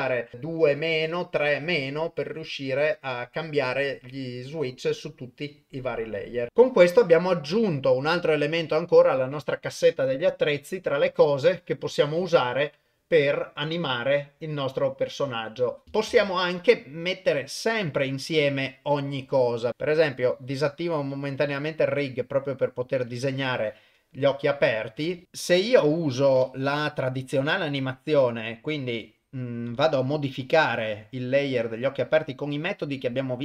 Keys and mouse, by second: 16.1 shift+space, 17.6-19.2 drag, 19.9 click, 21.0-23.0 drag, 25.2 click, 26.0-33.4 drag.